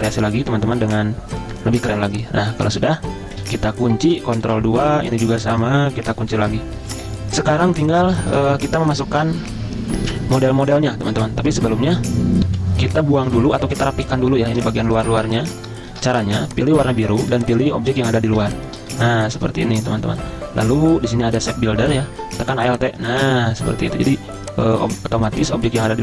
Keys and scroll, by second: 4.5 ctrl+2, 5.1 v, 6.4 ctrl+2, 6.8 z, 8.3 v, 12.5 F10, 12.6 F10, 16.0 ctrl+alt+2, 17.1 ctrl+z.